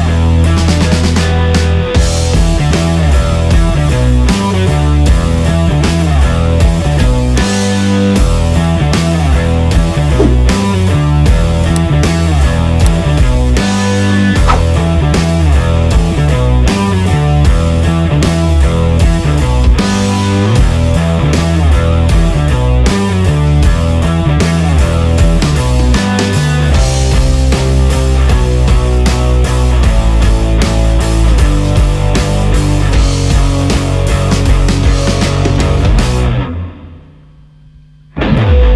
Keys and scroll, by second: 0.8 space, 2.6 space, 4.3 space, 5.8 space, 7.1 space, 7.7 space, 9.1 space, 10.2 space, 15.5 space, 17.5 space, 19.4 space, 20.5-23.8 typing, 25.4 space, 26.1 space, 28.1 space, 29.2 ctrl+z, 30.8 ctrl+z, 32.2 space, 33.3 space, 36.8 space, 37.5 space, 38.1 space.